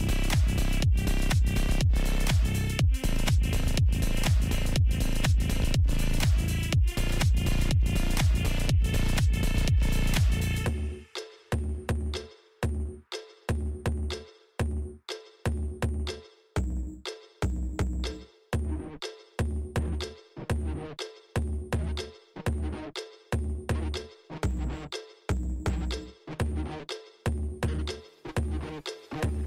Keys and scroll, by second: 16.8 space.